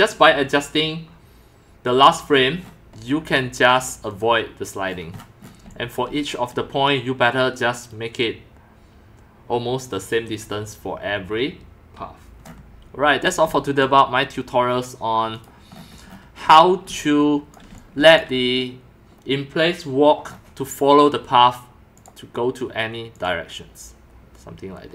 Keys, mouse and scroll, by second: 2.3 middle click, 2.6 middle click, 3.7 click, 4.1 click, 4.9 middle click, 5.1 middle click, 5.6 x, 5.7-6.3 drag, 6.1 c, 12.4 scroll up 1, 12.7-13.2 scroll down 2, 13.2 x, 13.3-14.0 drag, 13.5 c, 15.3 click, 15.7 right click, 16.1 right click, 16.2-18.2 typing, 16.5-17.5 drag, 17.8-18.2 drag, 20.2 middle click, 22.0 click, 22.4 typing, 23.1 click.